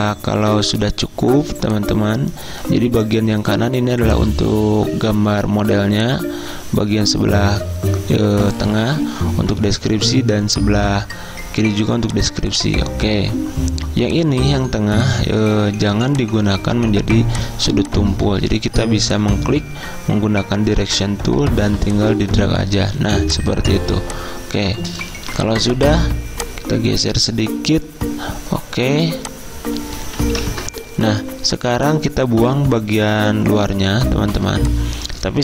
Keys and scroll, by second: 15.8 a, 17.0 z, 18.3 a, 22.9-25.3 typing, 30.5 ctrl+z.